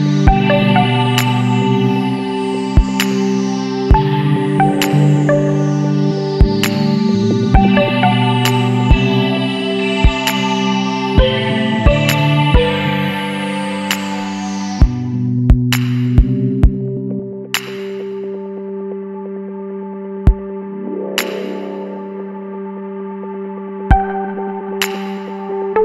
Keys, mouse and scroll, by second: 3.3-5.4 middle drag, 5.4 a, 6.3 shift+click, 6.8 shift+click, 7.3-8.3 scroll down 2, 8.3 b, 12.4 click, 15.4-16.5 middle drag, 16.5 Tab, 16.7 scroll down 1, 16.8-17.2 middle drag, 17.2-17.5 scroll up 1, 17.5 scroll down 1, 17.6-20.3 middle drag, 20.3 s, 21.4 ctrl+a, 22.8-23.3 middle drag, 23.3 scroll up 1, 23.4 scroll down 1, 23.6-25.0 middle drag, 25.0 click, 25.6 scroll down 1, 25.7-25.8 middle drag.